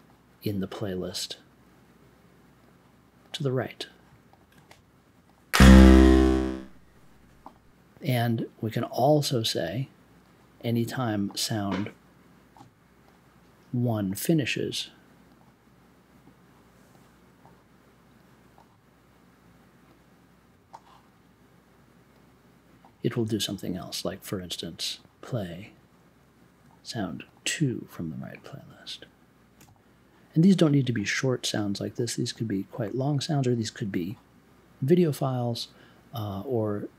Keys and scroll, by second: 29.5 2.